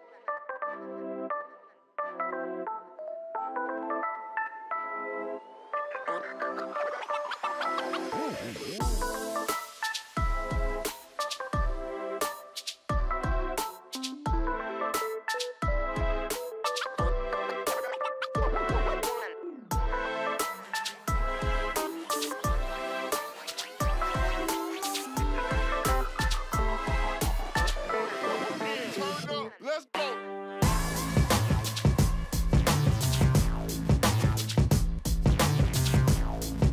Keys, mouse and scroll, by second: 11.9 ctrl+click, 13.3 ctrl+a, 15.6 ctrl+a, 15.9 ctrl+d, 17.5 right click, 20.7 ctrl+j, 22.8 ctrl+z, 25.2 ctrl+click, 27.7 Right, 28.0 Right, 28.2 Right, 29.8 Right, 30.5 ctrl+j, 33.0 ctrl+click, 36.2 Up, 36.4 Right.